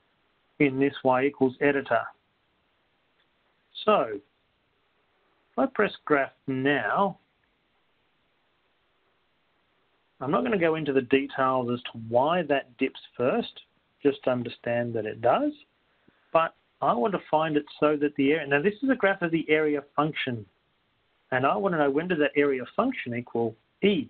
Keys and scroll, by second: 1.7 Right, 3.2 Right, 3.2 Up, 3.2 1.